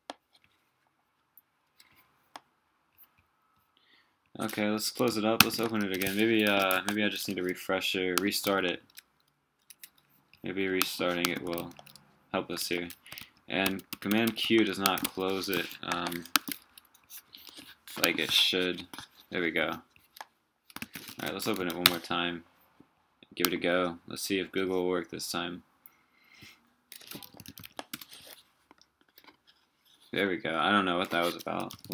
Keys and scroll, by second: 4.7 super+w, 5.4 super+space, 6.7 ctrl+Escape, 6.8 ctrl+`, 8.4 super+q, 11.6 super+q, 12.6 super+q, 13.2 super+q, 13.6 super+q, 13.9 super+q, 15.0 super+q, 15.9 ctrl+r, 20.8 super+space.